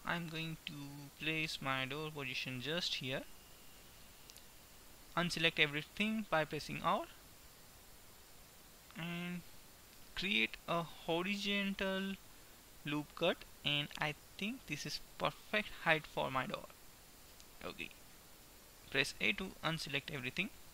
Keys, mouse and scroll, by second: 3.9 a, 6.9 ctrl+r, 16.4-18.0 middle drag, 18.0 a, 20.4 Tab.